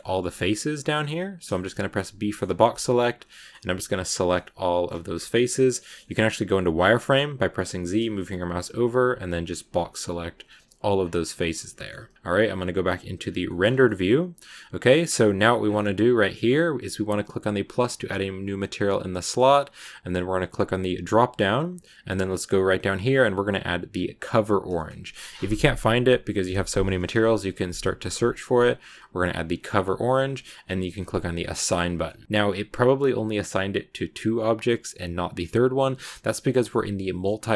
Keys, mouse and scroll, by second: 0.0 b, 1.4 shift+middle click, 2.3 b, 3.2 middle click, 3.5 b, 4.2 middle click, 4.8 b, 5.4 shift+middle click, 6.2 z, 10.9 scroll up 1, 11.0-11.6 scroll down 1, 11.6 middle click, 11.8 z, 13.0 scroll up 1, 13.1-13.6 scroll down 2, 13.3 shift+middle click, 13.6 scroll up 1, 13.7-14.9 middle drag, 14.9 scroll up 1, 15.0 scroll down 1, 15.1-17.6 scroll up 10, 17.6-23.5 drag, 31.2 click, 31.8 scroll down 2, 31.9 middle click, 32.2-33.4 scroll up 2, 34.7-35.7 scroll down 1, 35.7 Tab, 36.1 Tab, 37.1 middle click.